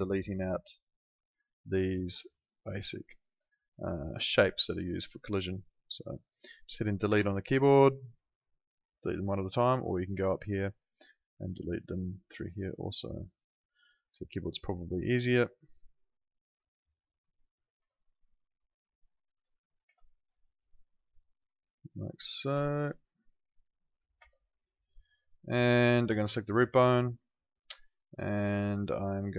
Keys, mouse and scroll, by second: 7.1 Delete, 8.2 click, 12.5 click, 14.1 Delete, 15.0 click, 16.0 Delete, 16.7 click, 17.8 Delete, 18.5 click, 19.9 Delete, 20.5 click, 23.2 click, 24.2 Delete, 24.8 click.